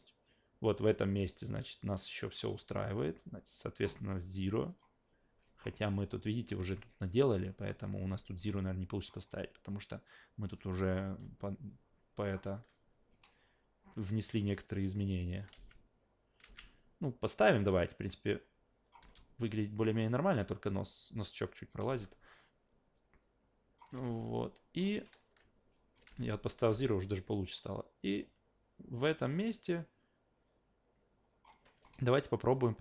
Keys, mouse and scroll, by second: 4.7 click, 5.6 alt+middle click, 6.1 alt+middle click, 6.7 ctrl+z, 8.0 alt+middle click, 8.2 alt+click, 9.3-10.1 alt+middle drag, 10.8 click, 11.4 alt+middle click, 13.1-15.4 drag, 15.6 alt+v, 16.4 alt+v, 16.6 click, 19.0 e, 20.9 click, 21.9 s, 22.9 click, 24.0 alt+middle click, 25.7 click, 26.1 alt+v, 26.7 alt+v, 26.9-31.4 drag, 31.9 alt+middle click.